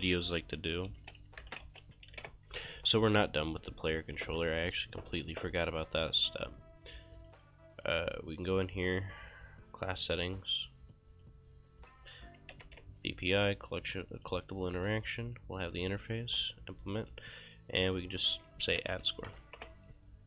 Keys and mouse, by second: 0.9-2.7 typing, 3.5 click, 4.0 ctrl+shift+s, 4.5 click, 5.0 right click, 5.3 ctrl+space, 5.7 click, 9.0 click, 9.8 click, 12.2-13.1 typing, 14.2 click, 15.7 right click, 16.4 click, 16.9 right click, 18.1-19.8 typing.